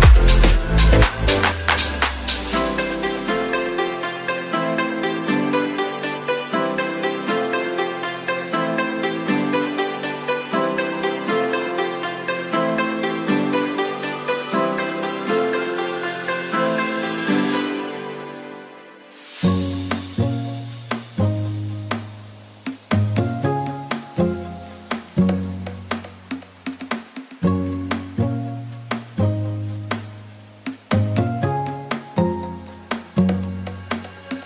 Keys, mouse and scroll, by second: 16.4 right click, 17.7 right click, 18.7 right click, 19.7 right click, 20.2 right click.